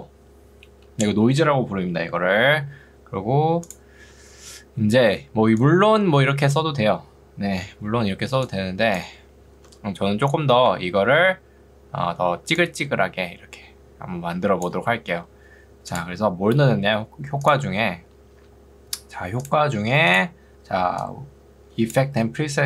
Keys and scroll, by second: 5.1 ctrl+2, 9.5 Escape, 11.1 ctrl+2, 15.1 Escape, 20.7 ctrl+2, 22.5 Escape.